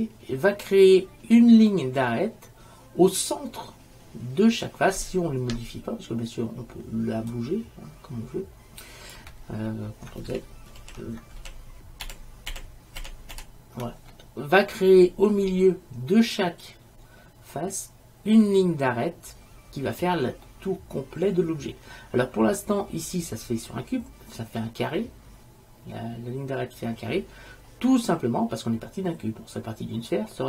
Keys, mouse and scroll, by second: 7.4-9.2 drag, 10.9 ctrl+z, 11.5 ctrl+z, 12.2 ctrl+z, 12.6 ctrl+z, 13.1 ctrl+z, 13.5 ctrl+z, 20.6-22.4 middle drag.